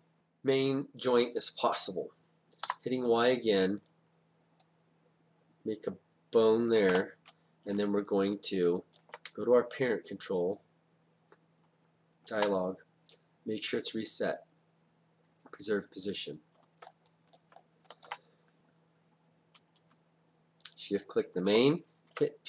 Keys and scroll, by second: 2.7 y, 6.9 Return, 9.3 space, 22.2 p.